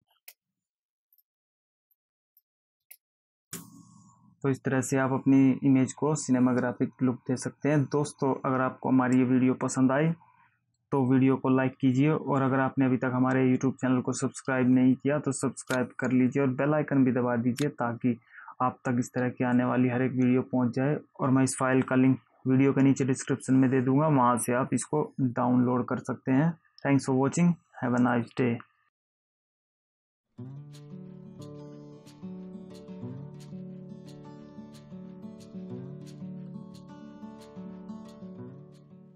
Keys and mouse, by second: 0.4 space, 1.4 click, 2.1 click, 3.0 space, 3.7 space.